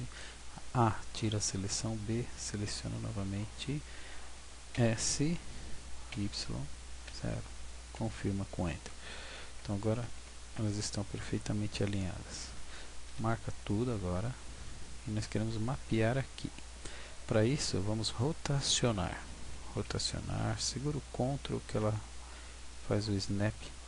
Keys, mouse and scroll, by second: 4.7 s, 9.1 w, 9.4 Tab, 10.6 w, 12.4 a, 14.2 w, 14.8 w, 19.8 r.